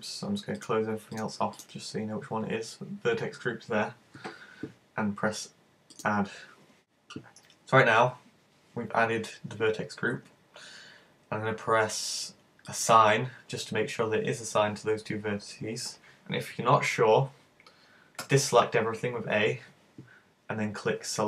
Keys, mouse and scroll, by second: 0.6 click, 1.6 click, 5.9 click, 12.7 click, 18.2 a.